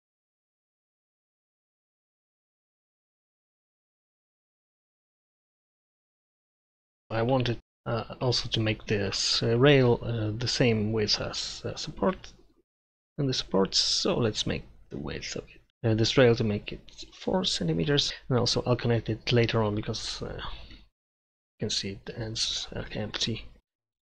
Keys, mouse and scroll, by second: 7.1 KP_Divide.